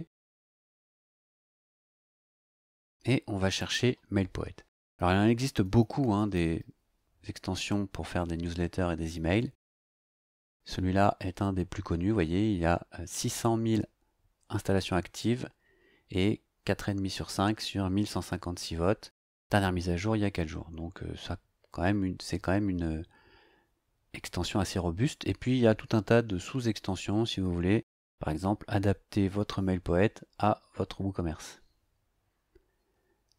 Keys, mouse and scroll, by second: 0.3 click, 3.6 click, 4.7-7.1 typing, 25.8 scroll down 2, 32.4 scroll up 2.